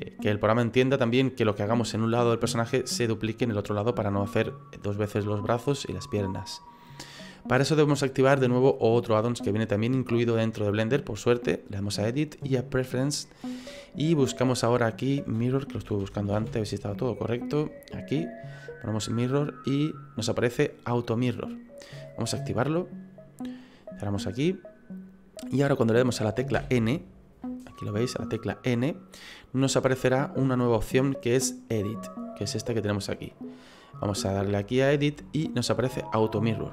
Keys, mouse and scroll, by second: 2.4 middle click, 3.5 middle click, 11.8 click, 26.5 n, 34.3 click, 36.2 click.